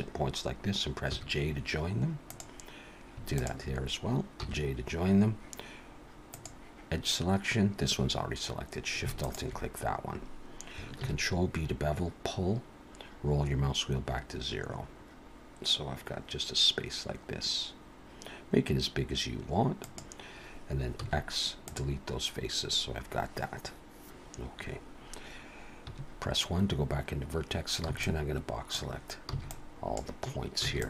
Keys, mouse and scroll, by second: 1.1 j, 2.3 click, 3.3 shift+click, 4.4 j, 6.2 click, 9.2 alt+shift+click, 11.0 ctrl+b, 21.0 x, 25.9 1, 27.9 b, 29.3 b, 30.6 b.